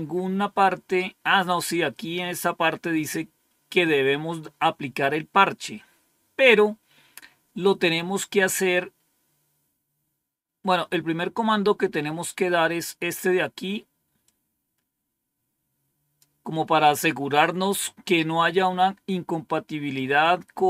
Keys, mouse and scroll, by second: 1.3-2.1 scroll up 1, 2.1-2.8 scroll down 2, 10.8-11.5 scroll up 2, 11.5-14.1 scroll up 1, 14.1-16.7 drag.